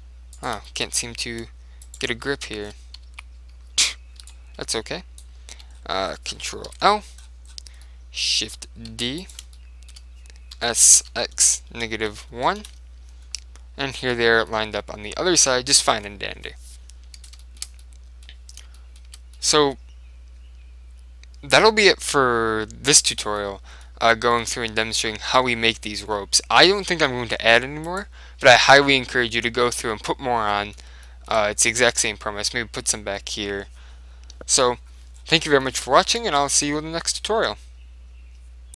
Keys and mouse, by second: 0.4 middle click, 1.2 click, 1.9 middle click, 2.4 right click, 2.8-4.7 middle drag, 3.2 z, 4.3 b, 5.7 z, 5.8 middle click, 6.8 ctrl+l, 8.0-11.4 middle drag, 9.0 shift+d, 10.6 s, 13.5-16.3 middle drag, 14.2 Tab, 17.5-21.2 middle drag, 23.5-30.3 middle drag, 28.0-29.7 right drag, 30.6-34.3 middle drag, 35.2-38.2 middle drag.